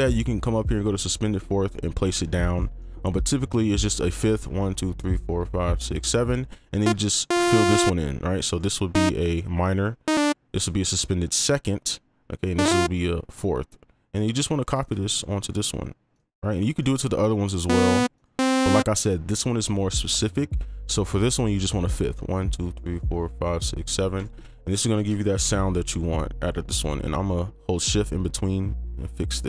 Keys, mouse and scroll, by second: 2.5 right click, 3.7 ctrl+click, 5.2 shift+Up, 5.5 shift+Up, 5.7-23.8 shift+Up, 6.1 7, 6.3 right click, 7.3 double click, 8.5 right click, 14.4 click, 14.8 click, 16.1 right click, 20.6 ctrl+click, 21.5 shift+click, 24.1 right click, 25.0 ctrl+f, 25.4 ctrl+l, 27.0 right click, 27.8 shift+click.